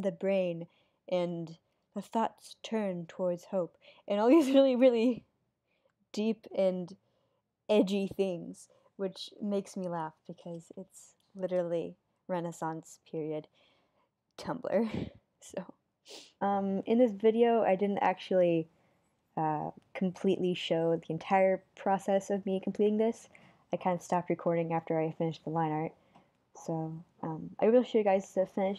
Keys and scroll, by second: 1.2 super+z, 2.5 super+z, 6.8 super+z, 7.5 super+z, 9.7 super+z, 10.7 super+z, 12.4 super+z, 14.3 super+z, 16.7 super+z, 17.8 super+z, 18.8 super+z, 26.5 super+z, 27.4 super+z.